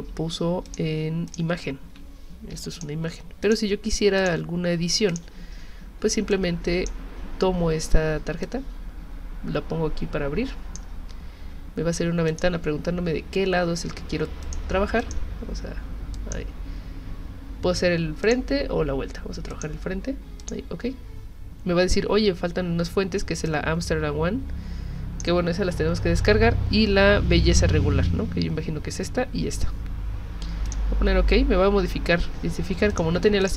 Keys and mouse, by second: 0.7 alt+click, 1.3 alt+click, 2.6 v, 2.7 click, 3.4 click, 4.2 click, 5.1 click, 6.3 click, 8.4-10.8 drag, 12.3 click, 14.4 click, 15.0 click, 18.2 click, 19.5 click, 20.4 click, 23.5-25.2 drag, 30.6 click, 32.6 z, 32.9 click, 33.4 click.